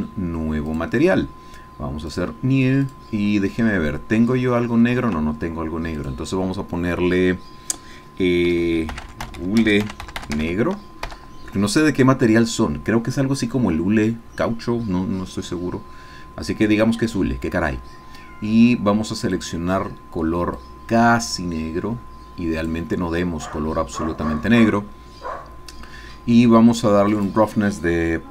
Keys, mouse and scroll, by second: 0.7 click, 2.1 click, 2.9 click, 5.0 Escape, 6.0 click, 8.9-10.4 typing, 11.2 Return, 17.6-18.8 scroll down 4, 19.3 click, 20.6-22.9 drag, 24.1-25.0 scroll down 2, 27.2 click.